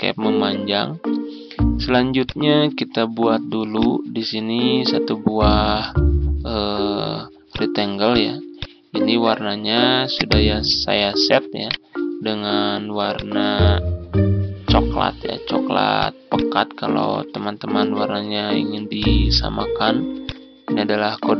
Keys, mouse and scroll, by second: 0.9-2.1 scroll up 1, 2.1-8.4 drag, 11.5 right click, 13.0 click, 17.1 ctrl+v, 18.8 click.